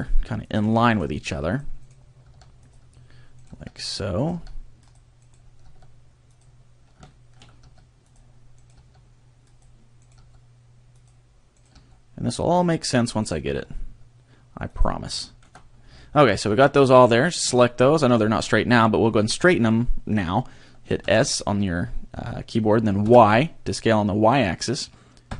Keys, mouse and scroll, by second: 0.5 click, 0.9 right click, 1.1 g, 1.5 click, 1.8 right click, 2.3 g, 2.7 click, 3.4 right click, 3.5 g, 3.9 click, 4.2 right click, 4.3 g, 4.9 click, 5.2 right click, 5.7 g, 6.4 click, 7.1 shift+middle click, 7.6 g, 8.1 click, 8.5 right click, 8.9 g, 10.0 right click, 10.2 g, 11.5 right click, 11.7 g, 12.7 click, 13.2 right click, 13.5 g, 14.8 click, 15.3 shift+middle click, 15.6 scroll down 1, 16.0 shift+middle click, 17.1 alt+right click, 21.0 s.